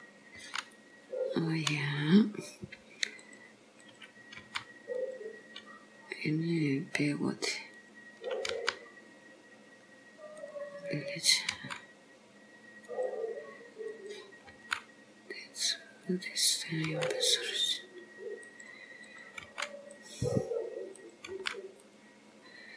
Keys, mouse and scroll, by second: 0.4 g, 3.3 click, 3.9 click, 4.5 g, 7.2 click, 7.9 click, 8.6 g, 10.9 click, 11.8 g, 14.0 click, 14.7 g, 16.6 click, 17.0 g, 19.1 click, 19.6 g, 21.0 click, 21.4 g.